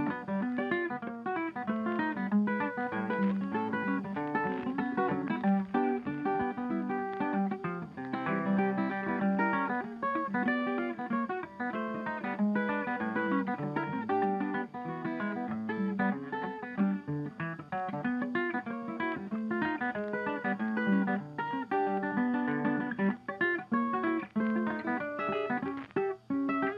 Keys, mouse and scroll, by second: 0.9 ctrl+g, 1.3 ctrl+click, 2.4 ctrl+scroll down 1, 4.0 ctrl+scroll down 3, 4.5 space, 5.6 ctrl+s, 6.3 ctrl+shift+e, 8.8 double click, 9.9-11.2 typing, 15.2-16.4 typing, 15.2 double click, 17.4 ctrl+scroll up 1, 17.7 ctrl+click, 18.3-18.8 typing, 18.5 shift+click, 21.3 ctrl+click, 22.6 ctrl+shift+e, 23.2 double click, 23.3-24.2 typing, 24.6 shift+scroll down 2, 25.6 ctrl+scroll up 3, 26.1 ctrl+click, 26.4 ctrl+shift+click, 26.7 d.